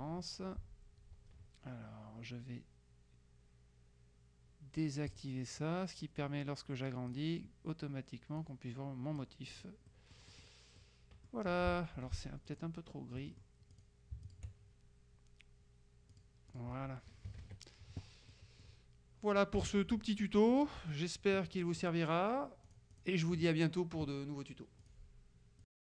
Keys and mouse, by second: 5.2 click, 6.3-7.7 drag, 8.5-10.2 drag, 10.1 right click, 10.5 click, 12.1 F2, 12.6 click, 13.3-14.4 drag, 13.9 right click, 16.3 click, 17.4 KP_Subtract, 18.4 click, 19.7 KP_Subtract, 21.0 click, 22.8 click, 24.9 click, 25.7 click.